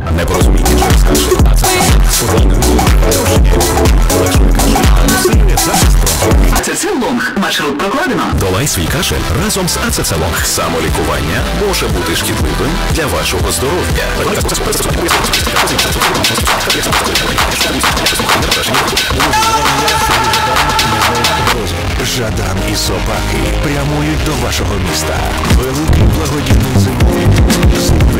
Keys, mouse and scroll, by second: 6.5 Page_Down, 21.5 Page_Down.